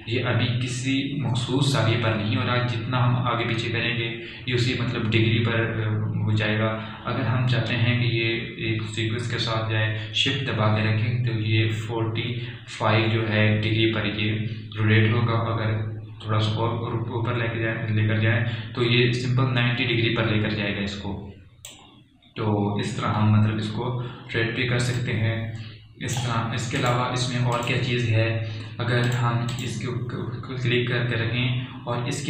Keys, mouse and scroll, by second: 26.1-28.0 drag.